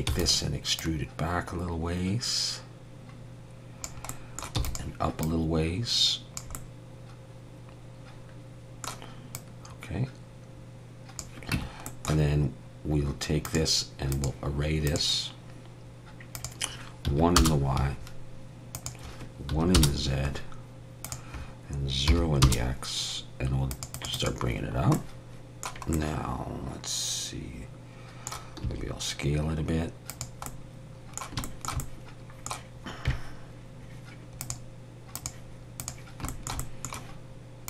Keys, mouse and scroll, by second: 0.1 e, 0.8 click, 4.1 middle click, 4.6 e, 5.2 click, 6.5 middle click, 9.3 click, 11.5 Tab, 11.9 middle click, 13.4 click, 14.1 click, 21.0-24.8 click, 24.8 scroll down 2, 25.0 middle click, 28.6 s, 30.5 middle click, 31.5 shift+middle click, 31.8 middle click, 34.4 click, 36.3 shift+middle click, 36.6 middle click.